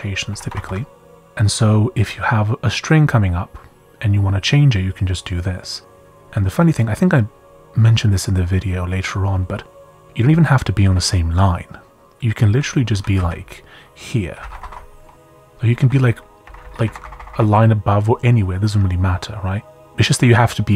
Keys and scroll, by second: 0.3 c, 0.4 c, 0.5 Escape, 4.1 typing, 10.3 j, 10.8 k, 12.2-16.4 typing, 16.6 Up, 16.8 Down, 17.0 Down, 17.1 Down, 17.3 Down.